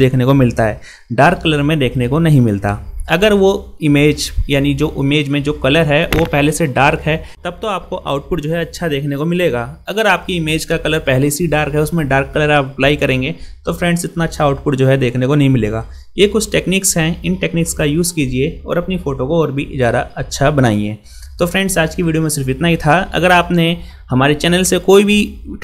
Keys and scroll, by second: 16.4 ctrl++.